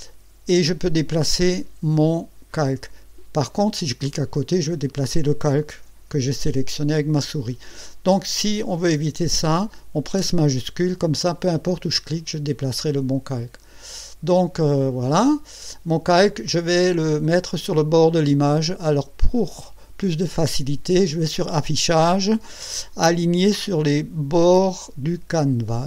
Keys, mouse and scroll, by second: 2.5-3.8 drag, 4.0 click, 7.2 ctrl+z, 11.2-14.0 shift+drag, 15.3 shift+click, 19.6 click, 25.4 click.